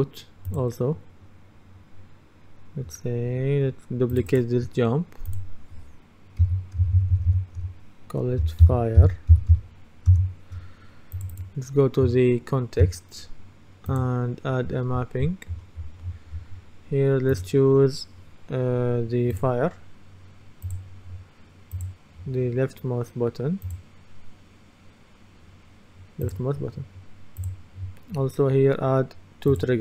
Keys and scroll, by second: 6.5 Right, 6.9 BackSpace, 8.5-10.1 typing, 10.2 Return.